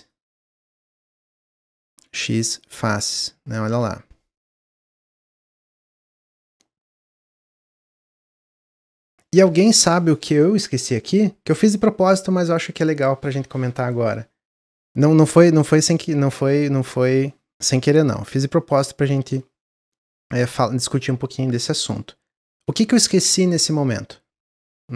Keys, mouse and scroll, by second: 1.3 shift+click, 1.9 x, 2.9 Tab, 3.2 scroll down 2, 3.5 z, 4.1-4.9 middle drag, 4.9 click, 5.1-9.7 middle drag.